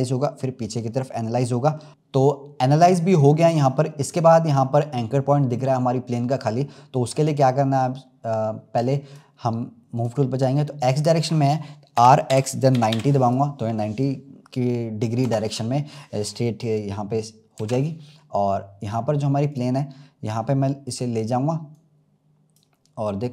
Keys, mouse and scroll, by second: 6.5-7.4 middle drag, 7.4-8.0 scroll down 10, 8.7-11.9 drag, 11.9 r, 15.2 KP_0, 16.2 scroll up 1, 17.5 s, 19.9-20.5 scroll up 3, 20.8-22.3 drag, 22.8 scroll up 1.